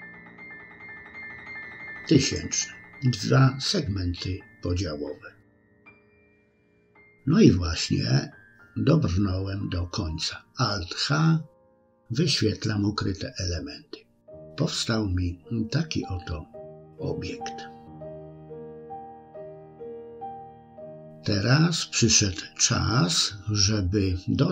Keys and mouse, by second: 4.4-5.4 middle drag, 6.4 click, 9.0 alt+h, 10.4 middle click, 11.4-12.5 middle drag, 12.8 click, 13.2-16.9 middle drag, 17.4-18.4 middle drag, 18.8 middle click, 19.8 KP_1.